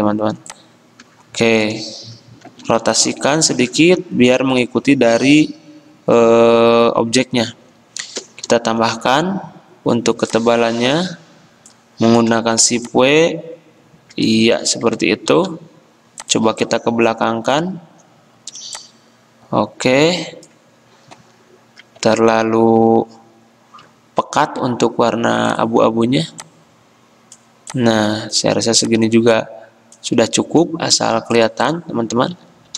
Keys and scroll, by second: 2.7 r, 9.1 w, 12.9 r, 15.5 a, 24.1 F6, 24.5 F6.